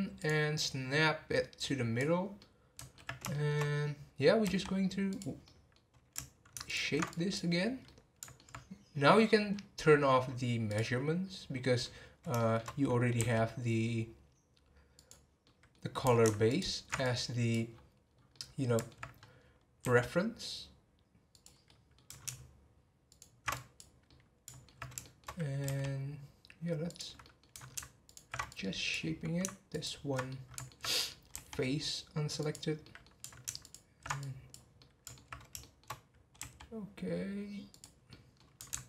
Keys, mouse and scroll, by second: 0.2 click, 0.9 scroll up 1, 1.5 scroll up 4, 1.6 click, 2.4-3.8 middle drag, 3.8 scroll up 1, 4.4 r, 5.4-6.6 middle drag, 6.6 ctrl+alt+shift+click, 7.1 click, 7.6 scroll down 3, 7.8-9.5 middle drag, 9.5-9.9 scroll up 10, 10.7 click, 11.3 scroll up 1, 12.2 scroll up 3, 12.3 shift+middle click, 13.1 r, 15.4-16.5 middle drag, 16.5 ctrl+alt+shift+click, 17.0 click, 17.7-18.0 scroll down 2, 18.3 middle click, 19.1 scroll up 2, 19.8 r, 21.6 scroll down 1, 21.6-23.0 middle drag, 23.0 ctrl+alt+shift+click, 23.5 click, 24.1-25.6 middle drag, 25.6 r, 27.2 middle click, 28.1 ctrl+alt+shift+click, 28.5-29.7 drag, 30.3-31.3 middle drag, 31.3 r, 32.8 middle click, 33.6 ctrl+alt+shift+click, 34.2 click, 34.8-36.4 middle drag, 36.4 r, 38.1 middle click.